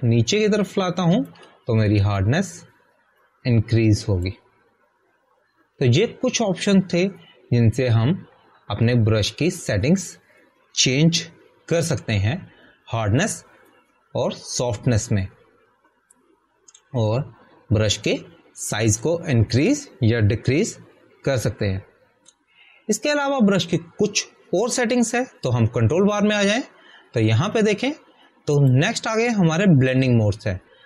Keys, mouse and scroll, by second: 4.1 click, 13.7 click, 13.9 Delete, 30.5 click.